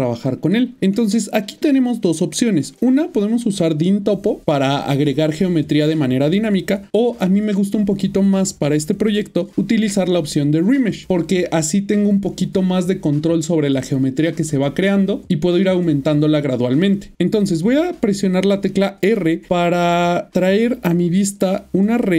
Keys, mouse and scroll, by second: 0.7 typing, 1.3 middle click, 17.1 Tab.